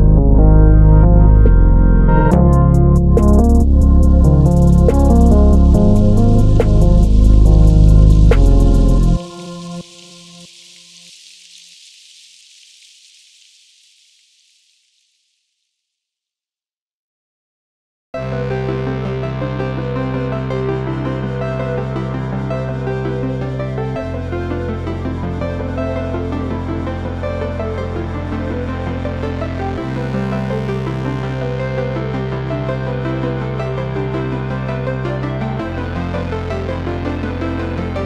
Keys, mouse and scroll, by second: 0.4 s, 1.7 click, 1.8-3.2 middle drag, 2.6 z, 3.2 scroll down 2, 3.4-5.6 middle drag, 3.9 scroll up 2, 5.6 click, 6.3 Delete, 6.7 click, 7.2 g, 8.6 click, 8.9 shift+d, 10.8 click, 11.8 click, 13.6 shift+d, 16.9 click, 17.2 KP_1, 18.0 KP_2, 18.3 KP_3, 19.0-22.6 shift+middle drag, 19.6-20.2 scroll up 2, 20.2 s, 22.6 click, 23.0 g, 25.4 click, 25.7 scroll down 1, 26.1 middle click, 26.8 ctrl+s, 26.9 click, 27.1-30.9 middle drag, 27.8-28.3 scroll up 2, 30.3-30.9 scroll up 2, 30.9 click, 31.1-31.6 scroll down 1, 31.6 shift+d, 37.7 click.